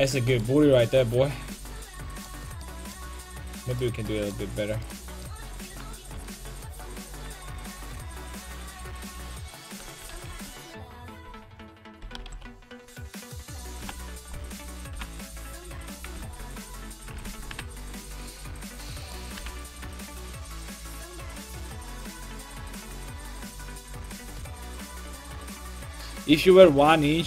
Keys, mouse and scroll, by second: 1.1 ctrl+z, 3.7 click, 8.3 middle click, 9.1-11.3 right drag, 10.0 KP_5, 10.1 KP_1, 10.4 KP_3, 12.0 KP_5, 12.1 KP_1, 12.3 KP_3, 13.2-15.5 middle drag, 13.8 KP_5, 14.9 g, 15.9-17.1 right drag, 16.8 alt+o, 17.5 g, 19.4 g, 23.5 middle click, 24.2 Tab, 24.5-27.2 middle drag.